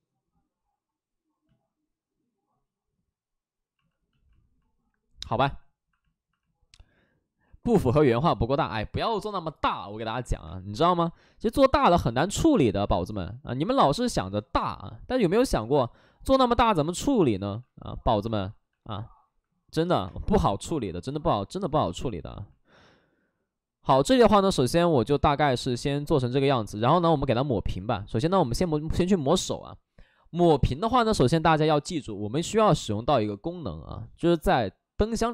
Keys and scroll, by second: 10.4 space, 17.2 shift+f, 18.3 shift+f, 18.5 shift+f, 20.0 space, 20.9 shift+f, 28.5 space, 28.9 space.